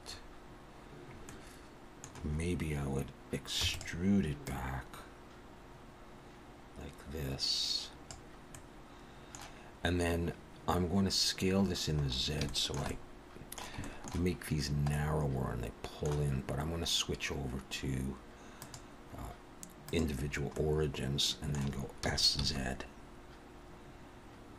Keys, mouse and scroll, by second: 1.2 middle click, 3.6 e, 4.4 click, 8.5 middle click, 11.9-12.4 scroll up 4, 12.5 shift+middle click, 12.9 middle click, 13.8 shift+middle click, 14.6-14.9 scroll down 1, 14.9 middle click, 18.5 click, 20.5 middle click, 22.0 s.